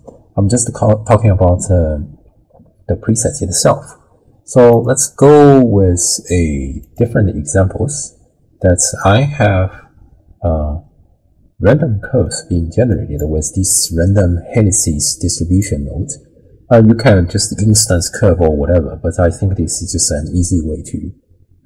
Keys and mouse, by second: 4.8-7.0 drag, 9.0-12.3 middle drag, 12.9 click, 14.0-15.6 drag.